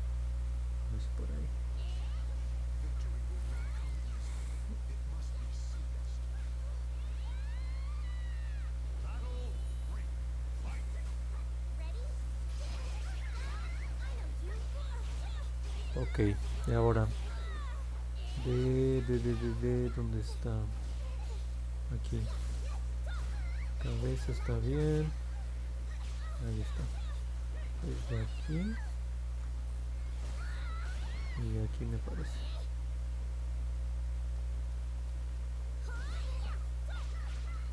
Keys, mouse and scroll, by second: 0.4 alt+middle click, 2.3 middle click, 9.2 click, 10.0 click, 10.6 click, 10.9 click, 11.6 click, 13.0 click, 13.3 click, 29.2 ctrl+z.